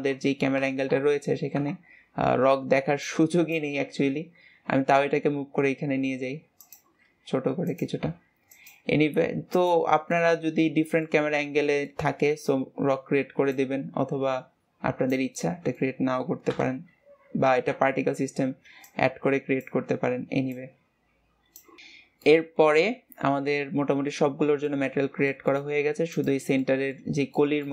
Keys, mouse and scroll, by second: 0.9 KP_0, 1.6 KP_0, 9.2 s, 10.1-11.3 middle drag, 11.3-11.8 scroll up 2, 11.8-13.5 middle drag, 13.5 click, 15.3-16.5 middle drag, 16.5 KP_0, 17.5 ctrl+s, 18.8-20.6 drag, 21.8 ctrl+s, 22.2-24.8 middle drag, 24.8-25.3 scroll up 2, 25.3 shift+middle click, 26.1 click, 26.6-27.7 middle drag.